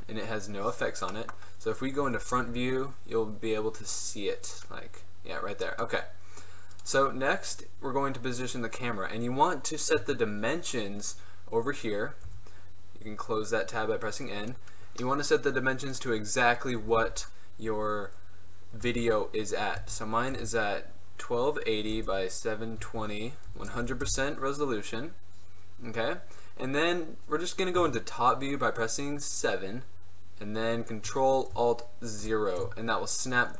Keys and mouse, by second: 1.2 click, 2.1 KP_1, 2.5 KP_5, 5.0-5.9 middle drag, 7.5-11.2 middle drag, 12.3 n, 13.8-15.6 drag, 16.0-23.9 drag, 23.9 KP_0, 25.3 middle click, 27.8 KP_7, 31.4 middle click, 32.3 ctrl+alt+KP_0.